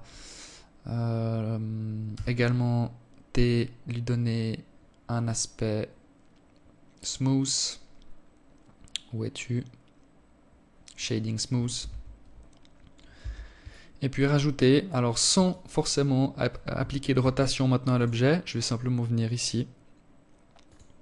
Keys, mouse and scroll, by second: 0.5 t, 1.3-2.1 scroll up 1, 2.1 scroll up 1, 3.9-5.3 scroll up 1, 5.3-5.6 scroll down 1, 5.6-8.9 scroll down 8, 9.4 click, 10.3 Tab, 11.6 Tab, 12.1 alt+click, 13.3 scroll up 2, 13.9 alt+click, 15.6 ctrl+r, 19.5 ctrl+r.